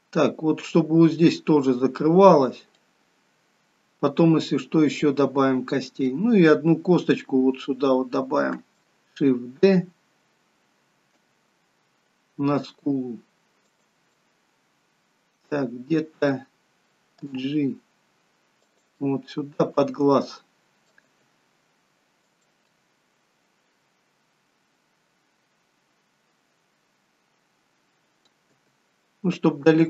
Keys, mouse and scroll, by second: 2.8 middle click, 11.1 shift+d, 14.2 middle click, 19.1 middle click, 19.1 g, 21.2 g, 22.8 middle click.